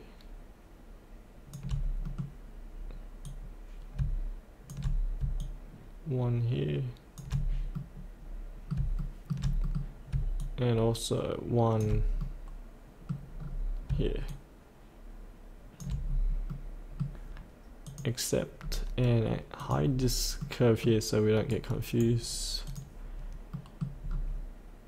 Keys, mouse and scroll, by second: 2.0 middle click, 3.2 click, 5.4-7.2 shift+drag, 7.4-7.7 scroll up 1, 7.7 middle click, 8.9 shift+middle click, 9.6 middle click, 10.4 shift+click, 12.2 middle click, 13.3-13.9 scroll down 1, 14.3 shift+click, 16.0-16.5 scroll up 1, 16.5 middle click, 17.8 click, 18.6 scroll down 1, 19.6 click, 19.9 scroll up 1, 20.5 middle click, 21.5 right click, 22.6 click, 23.5 middle click, 24.0-24.4 scroll down 1.